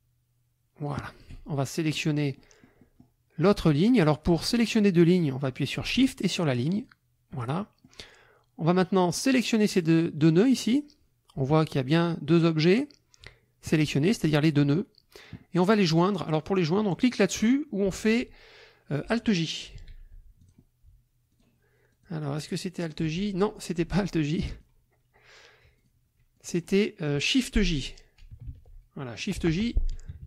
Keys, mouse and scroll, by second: 2.0-3.2 drag, 4.1 click, 6.7 shift+click, 7.5 shift+click, 9.1 click, 19.9 alt+j, 20.4 alt+click, 21.3 click, 21.9 click, 22.4 click, 23.2 ctrl+z, 24.2 ctrl+click, 25.7 shift+click, 26.4 shift+click, 28.5 shift+j, 29.2 click, 30.1 KP_Subtract.